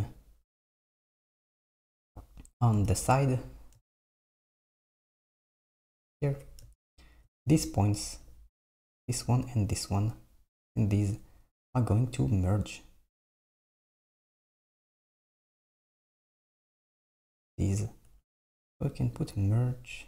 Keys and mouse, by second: 1.1 KP_1, 3.0 KP_3, 5.3-6.7 drag, 13.4-16.0 drag, 16.0 Tab, 16.3 Tab, 16.7 Tab, 18.1 Tab, 19.2-20.0 drag.